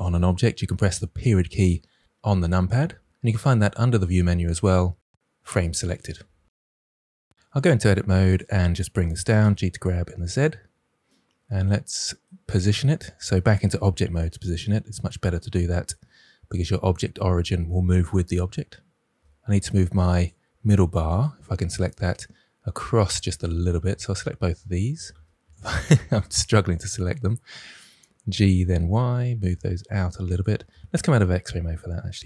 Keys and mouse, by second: 1.1 KP_Decimal, 3.9-6.5 drag, 7.5 Tab, 8.0 click, 9.1 g, 9.3 z, 10.3 click, 11.0 middle drag, 12.4 Tab, 13.4 g, 14.4 y, 16.4 click, 19.2 ctrl+z, 21.1 click, 22.2-23.4 middle drag, 23.9 shift+click, 25.1 ctrl+z, 26.1 ctrl+z, 26.6 shift+click, 27.9 g, 29.0 y, 30.6 alt+z, 32.1 g.